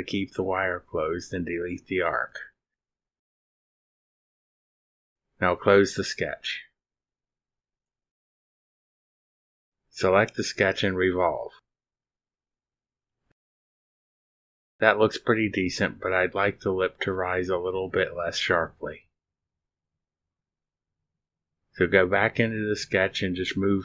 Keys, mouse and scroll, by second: 1.2 click, 1.8 click, 3.2 click, 4.5 Delete, 5.2-6.1 scroll down 4, 6.4-6.9 drag, 7.1 scroll down 1, 7.8-8.1 scroll down 2, 9.4 click, 10.6 click, 11.2 click, 13.0 click, 14.4 click, 15.6-19.9 drag, 21.2 click, 23.4 click.